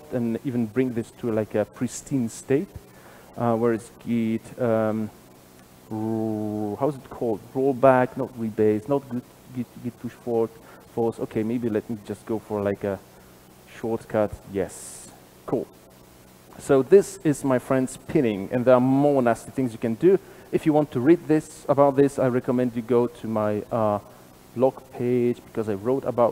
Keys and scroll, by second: 15.1 alt+super+z.